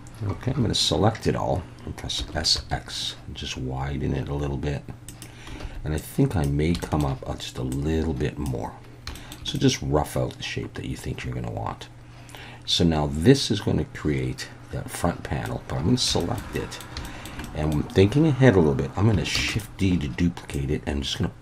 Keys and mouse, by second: 0.5 a, 2.2 s, 2.5 x, 5.0 click, 5.7 alt+a, 6.0 click, 6.8 shift+middle click, 7.8 click, 9.1 shift+middle click, 9.5-15.5 middle drag, 15.8 a, 16.2 shift+middle click, 16.5 middle click, 17.1 shift+middle click, 17.5 middle click, 19.4 shift+d, 19.5 shift+click, 20.6 click.